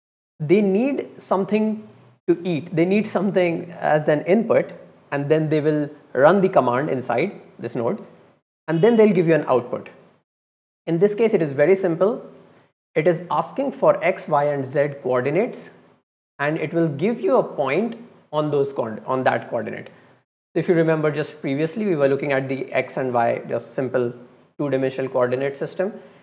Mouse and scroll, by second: 12.1-12.4 drag.